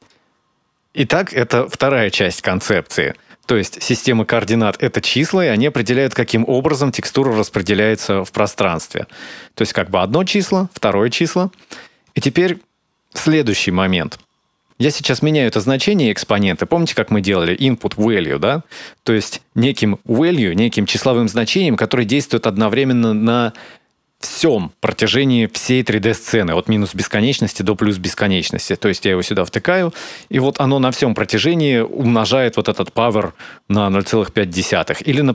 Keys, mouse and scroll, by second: 0.1-1.3 scroll down 4, 1.3-2.2 scroll down 1, 15.5-16.1 scroll down 2, 16.3 shift+a, 28.4 click, 30.3 click, 33.8 click, 35.0 click.